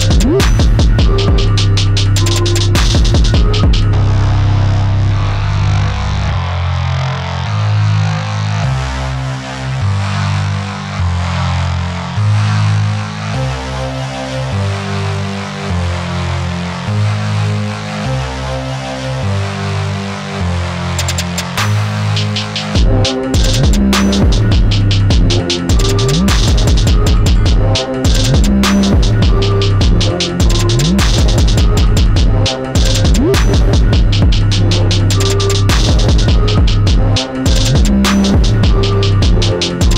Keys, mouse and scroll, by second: 3.1 click, 6.7 Escape, 7.2 click, 7.5 x, 8.8 click, 9.3 x, 9.8 Escape, 11.1 click, 11.5 r, 12.5 Escape, 13.0 click, 13.6 x, 14.5 click, 15.5 e, 17.5 scroll up 1, 19.9 scroll up 1, 23.4 middle click, 23.5 middle click, 24.3 click, 29.5 shift+scroll up 1, 30.8 middle click, 30.9 middle click, 31.5-33.0 scroll down 1, 33.0 click, 34.3 shift+middle click.